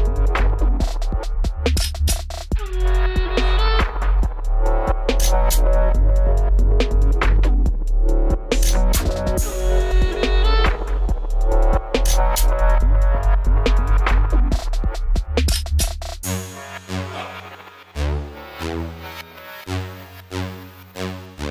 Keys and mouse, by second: 0.0 b, 1.0 click, 1.5 b, 3.2-5.5 drag, 4.8 w, 6.0 w, 10.9-12.7 drag, 12.7 w, 14.1 click, 16.7 w, 17.7 w, 20.4 w.